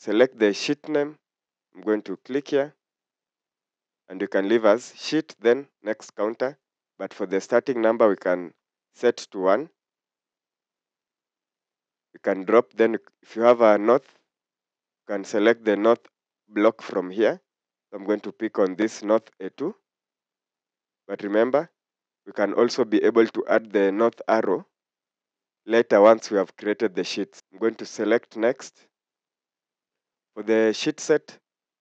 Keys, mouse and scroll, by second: 8.5 1, 27.4 click.